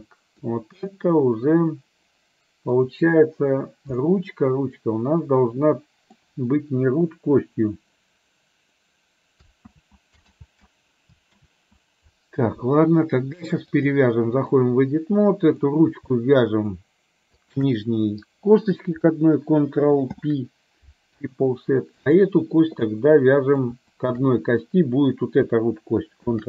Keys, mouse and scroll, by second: 1.0-2.9 middle drag, 4.2-6.1 middle drag, 9.7 ctrl+z, 10.4 ctrl+z, 11.5 ctrl+z, 13.9 click, 15.5 click, 17.5 shift+click, 20.2 ctrl+p, 22.1 click, 23.0 middle click, 23.9 shift+click, 26.3 ctrl+p.